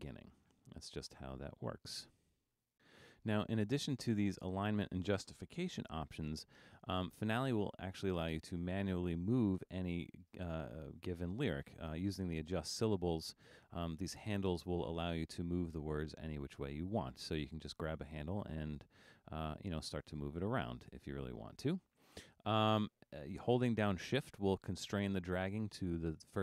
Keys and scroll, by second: 22.1 super+z.